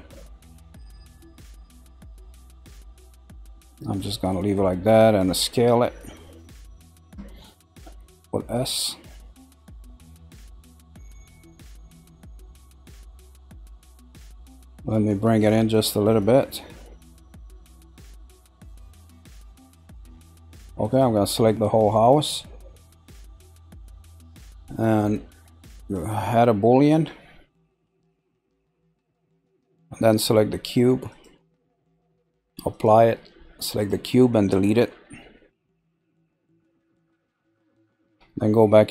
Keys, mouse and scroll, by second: 4.4 middle click, 5.3 scroll down 3, 5.8-7.6 middle drag, 7.6 s, 12.2-14.0 shift+middle drag, 14.1-15.3 middle drag, 15.3 click, 20.3-20.9 scroll, 20.9 click, 21.5 scroll down 2, 21.5-24.5 middle drag, 25.8 click, 26.8-29.8 drag, 30.0 click, 32.6 click, 33.7 click, 34.7 Delete, 35.3-36.2 scroll up 3, 36.2-38.9 shift+middle drag.